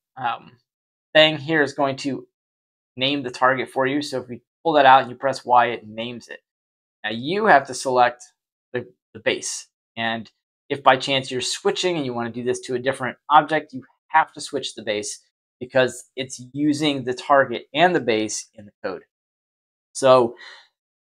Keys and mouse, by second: 0.0-0.3 typing, 3.6 click, 4.6 y, 7.0 click, 10.5-11.6 middle drag.